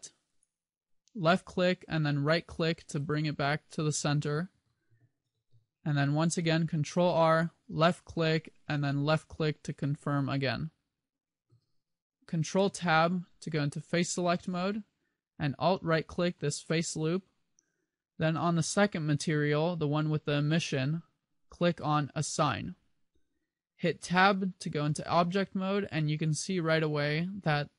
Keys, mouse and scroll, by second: 3.2 right click, 4.0 a, 4.8 ctrl+r, 9.7 click, 12.6 ctrl+Tab, 16.0 alt+right click, 22.3 click, 24.3 Tab.